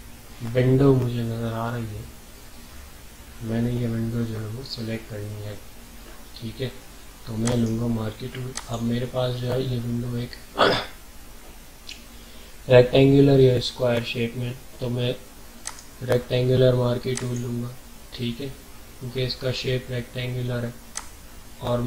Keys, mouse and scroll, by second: 7.4 right click, 8.0 typing, 8.5 click, 11.0 typing, 15.6 right click, 15.6 typing, 17.1 click, 17.6 click, 20.9-21.8 drag.